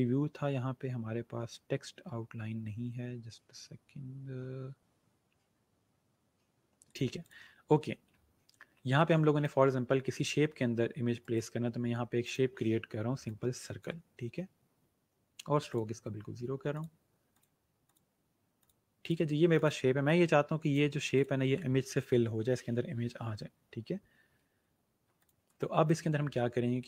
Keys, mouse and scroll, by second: 1.9-2.9 scroll up 1, 2.9-3.8 scroll, 6.7 click, 8.2-8.8 alt+scroll up 2, 8.8 space, 11.1 right click, 12.1 click, 24.7-25.1 alt+scroll down 2, 25.1 click, 25.4 space, 25.5 click.